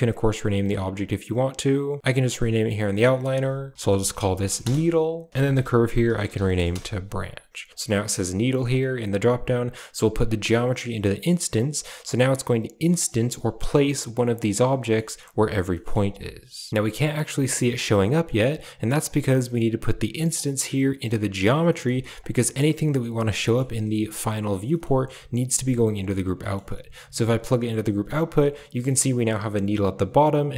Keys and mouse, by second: 0.4 click, 1.6 click, 2.0 drag, 2.9 click, 3.1-4.5 drag, 3.7 e, 5.3-6.6 drag, 7.6 click, 8.2 click, 8.5 click, 9.8-11.1 drag, 11.4 click, 11.9 click, 13.2 g, 14.8 middle drag, 15.6 middle drag, 15.9 a, 16.6 middle click, 16.7-18.3 drag, 20.2-21.4 drag, 21.5 middle click, 22.1 click, 23.3 middle click, 24.6 middle click, 25.2 g, 26.4 middle click, 27.9 click.